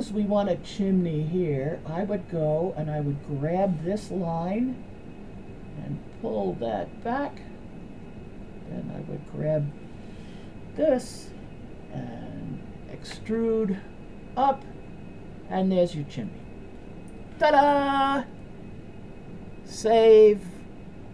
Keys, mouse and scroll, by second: 1.8 click, 3.4 click, 4.8-7.2 drag, 8.4 click, 9.2 click, 9.9-10.5 middle drag, 13.2 e, 14.9-16.3 middle drag, 16.5 middle click.